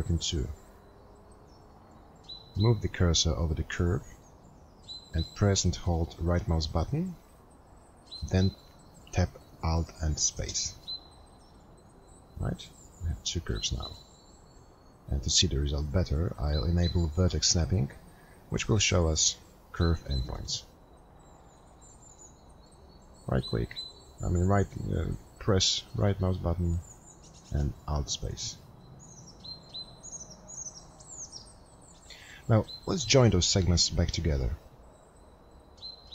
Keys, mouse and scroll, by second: 12.6 alt+space, 12.6 right click.